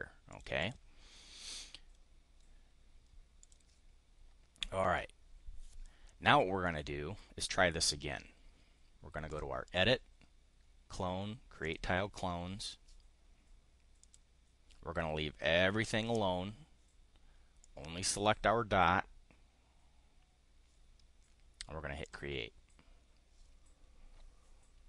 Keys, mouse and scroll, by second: 0.3 click, 0.6 click, 3.3 click, 6.6-7.3 drag, 9.2 click, 11.6 click, 14.0 click, 17.5 click, 22.0 click.